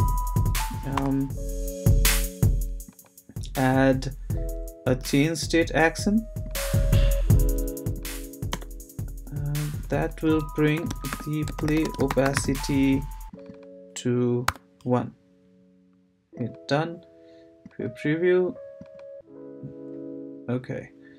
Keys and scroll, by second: 0.9 BackSpace, 8.5 Return, 10.4-12.8 typing, 14.5 l.